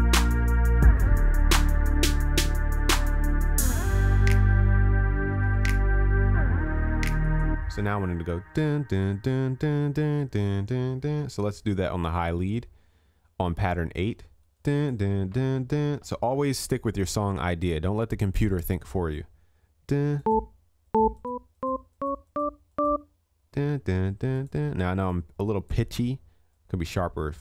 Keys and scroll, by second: 1.7 ctrl+s, 5.6 ctrl+s.